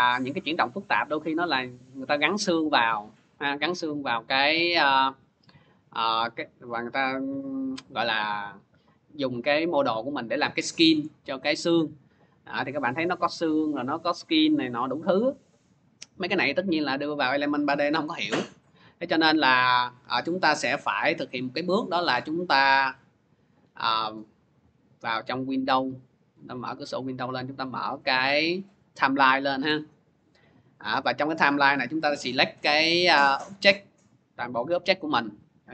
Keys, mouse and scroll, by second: 0.1 click, 1.2 click, 1.7-2.1 scroll, 2.9 middle click, 3.3 middle click, 4.7 alt+middle click, 5.1 alt+middle click, 6.1 alt+click, 9.8 alt+click, 13.2 click, 14.2 click, 14.7 click, 15.8 click, 16.4 click, 16.9 click, 17.8 click, 18.5 click, 20.6 click, 21.5 click, 22.7 click, 24.4 click, 26.2 click, 27.0 click, 28.6 click, 30.5 click.